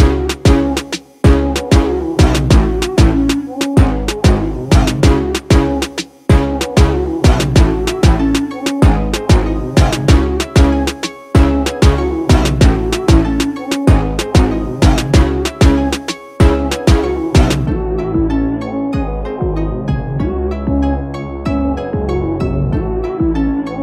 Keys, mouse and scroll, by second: 2.2-7.3 drag, 9.6-11.6 scroll up 1, 12.8 scroll up 1, 12.9-19.5 drag.